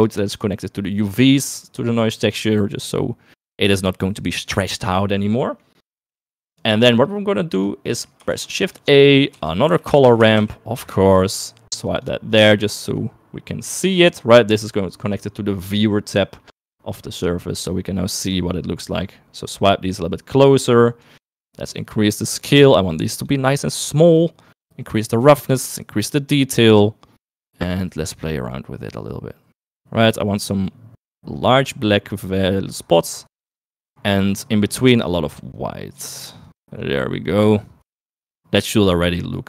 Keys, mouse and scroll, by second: 0.6-3.0 drag, 5.4 middle click, 6.7-7.8 drag, 8.4 shift+a, 10.5 r, 14.2 middle click, 14.9 middle click, 15.5 middle click, 16.5 middle click, 18.0 middle click, 19.0 click, 20.8 click, 21.3 middle click, 21.9-23.3 drag, 24.2-25.5 drag, 25.8-26.8 drag, 27.3 middle click, 28.0-29.0 drag, 29.7-30.7 drag, 31.5-32.7 drag, 33.0-34.5 drag, 34.6 click, 35.7 click, 36.7-38.5 drag.